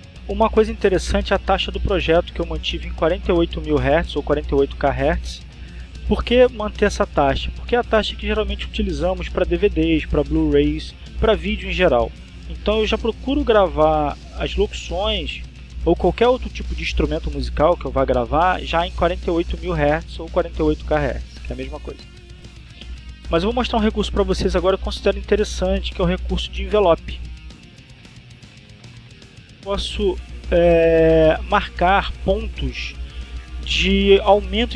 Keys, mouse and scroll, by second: 29.6 click.